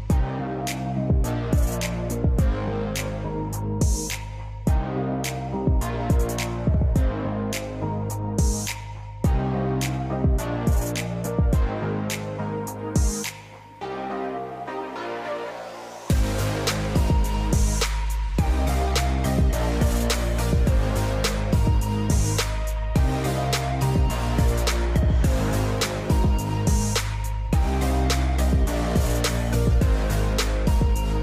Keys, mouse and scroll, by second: 7.5-12.7 drag, 21.1 shift+a, 22.8 s, 24.4 Tab, 26.9-30.7 right drag, 30.7-31.2 drag.